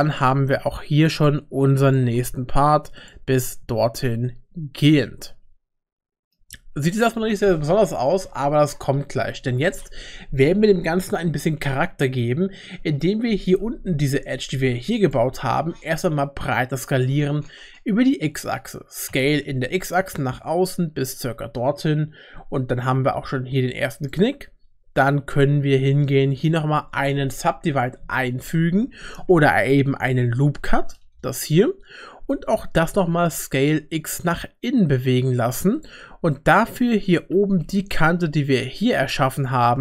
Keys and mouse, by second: 0.3 g, 1.9 g, 3.6 Tab, 4.1-6.3 middle drag, 12.1 Tab, 13.5 2, 15.0 alt+click, 19.1 s, 27.5 ctrl+r, 33.1 s, 36.3 middle click, 37.3 2, 37.7 click.